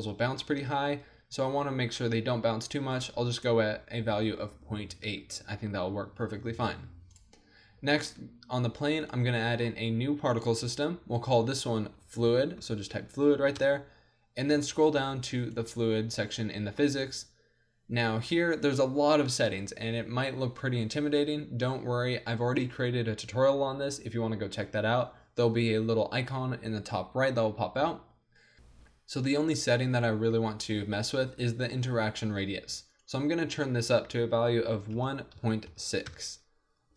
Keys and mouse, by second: 8.9 middle click, 9.6 click, 12.7-14.6 drag, 14.6 middle click, 15.4-18.7 drag, 20.1-34.9 drag.